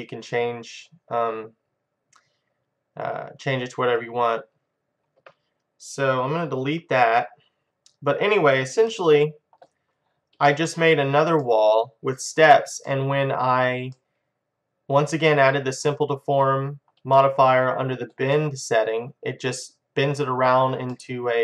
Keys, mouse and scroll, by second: 2.6 middle click, 6.7 Delete, 7.8 middle click, 8.9 middle click, 9.8-14.2 middle drag, 14.6 middle click, 15.7 middle click, 18.6 middle click, 21.0-21.4 middle drag.